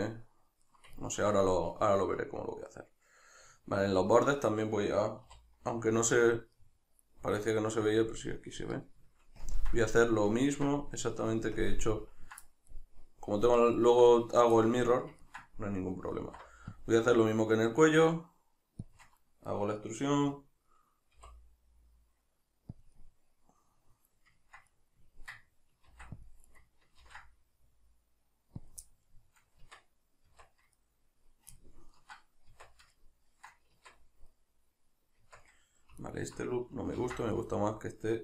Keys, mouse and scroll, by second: 5.3 3, 7.5 alt+right click, 9.4 ctrl+KP_Add, 12.7-18.9 middle drag, 16.2 alt+e, 18.9 shift+click, 19.5-22.9 middle drag, 22.9 click, 23.0-26.6 middle drag, 25.9 ctrl+r, 26.6 right click, 27.1 ctrl+b, 28.6 click, 28.8-36.0 middle drag, 29.6 Tab, 32.5 Tab, 33.7 Tab, 35.2 Tab, 36.0 alt+right click, 37.1 ctrl+x, 37.3-38.2 middle drag.